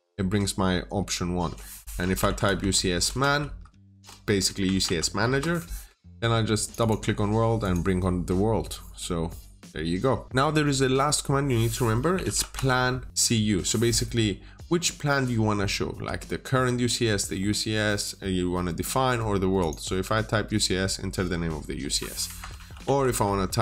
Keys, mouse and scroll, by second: 0.0-0.5 scroll up 1, 0.5-1.9 scroll down 1, 2.0-4.7 typing, 5.1 Return, 6.5 click, 6.7 double click, 7.5 click, 8.7 scroll down 1, 9.0-12.0 scroll up 1, 12.0-12.4 typing, 13.1 Return, 19.5 click, 22.1 click, 22.4 typing, 23.0 Return.